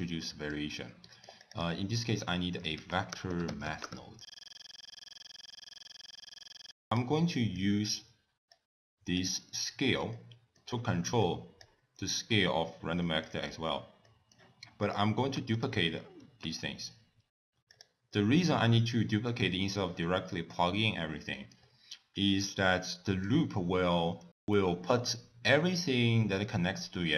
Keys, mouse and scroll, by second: 0.2 middle click, 0.7 scroll up 2, 1.0 middle click, 1.4 click, 2.0 ctrl+a, 4.3 middle click, 4.4 click, 4.5 click, 4.5 middle click, 4.7 click, 4.8 click, 4.8 middle click, 4.8 click, 4.9 click, 5.4 click, 5.7 middle click, 5.8 scroll down 3, 6.1 middle click, 6.4 click, 6.6 click, 6.9 click, 7.2 middle click, 8.5 click, 10.2 middle click, 11.2 click, 13.0 middle click, 13.4-14.1 scroll down 6, 14.1 middle click, 14.9 click, 15.5 shift+click, 16.2 shift+d, 18.1 middle click, 21.3 middle click, 21.5 scroll up 3, 22.6 middle click, 24.6 scroll up 1, 24.8 middle click.